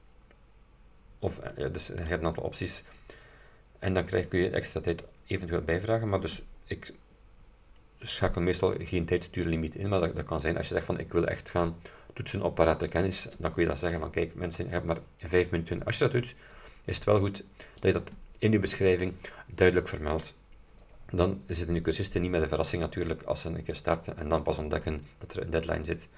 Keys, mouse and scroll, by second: 2.1 click, 17.9 click.